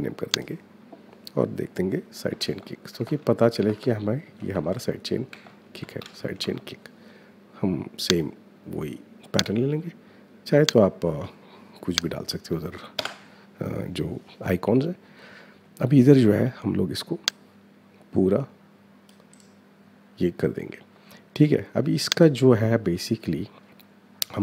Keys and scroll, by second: 2.0-6.9 typing, 12.7 Return.